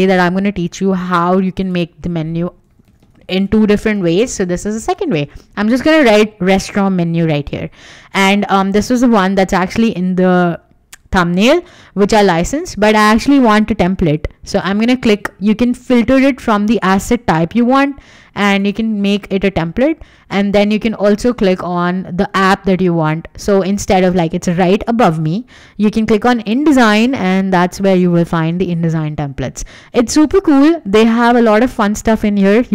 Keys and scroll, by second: 2.4-5.0 typing, 5.1 Return.